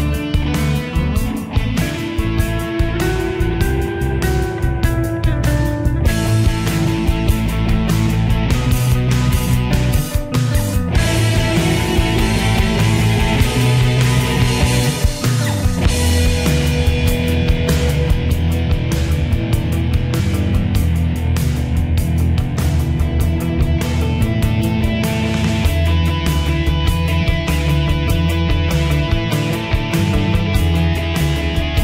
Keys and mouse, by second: 3.7 click, 21.8 click.